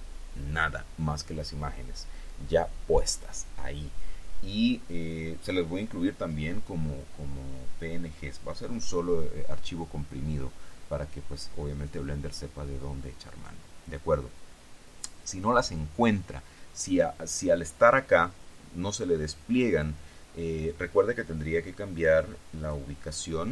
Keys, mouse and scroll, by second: 22.8 click.